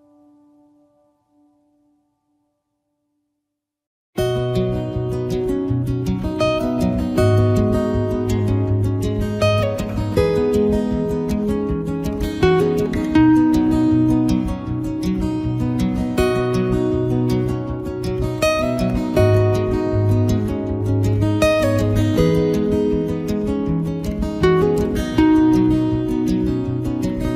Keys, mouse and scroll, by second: 0.6 right click, 0.8 click, 2.5 ctrl+right click, 3.0 ctrl+right click, 3.1 right click, 3.4 click, 4.2 click, 4.7 right click, 5.1 click, 6.0 click, 7.5 middle click, 7.8 right click, 8.4 click, 10.2 right click, 10.3 ctrl+right click, 10.6 click, 11.8 click, 14.0 click, 14.1 ctrl+right click, 14.5 shift+right click, 14.8 right click, 15.1 click, 15.8 click, 17.0 right click, 17.5 ctrl+right click, 17.6 shift+right click, 18.0 right click, 18.3 click, 19.5 right click, 21.0 click, 21.3 click, 22.1 click, 22.2 ctrl+right click, 22.5 shift+right click, 22.8 right click, 23.2 ctrl+right click, 23.6 click, 25.1 click, 25.5 middle click, 25.8 right click, 25.9 click, 26.0 click, 27.0 middle click.